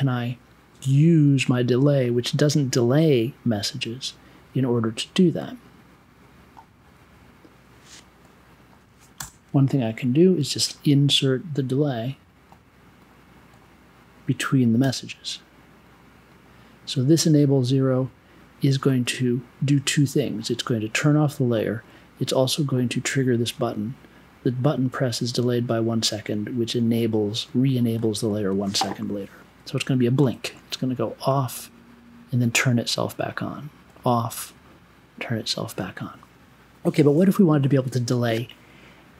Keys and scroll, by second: 9.1 BackSpace, 10.3 BackSpace, 14.8 b.